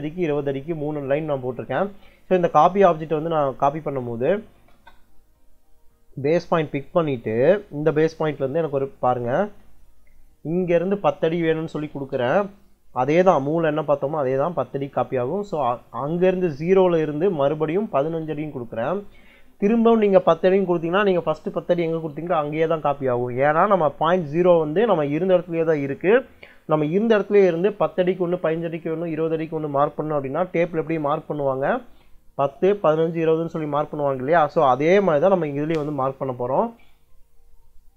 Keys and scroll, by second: 3.9-4.9 typing, 11.5-12.5 typing, 13.8 ', 14.4 Return, 17.9 1, 18.6 '.